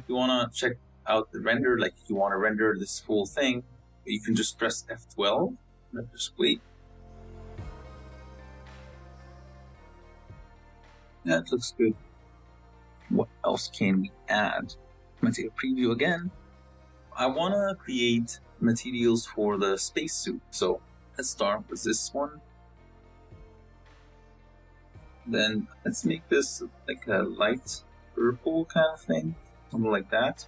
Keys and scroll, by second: 3.0 z, 5.9 F12, 16.7 z.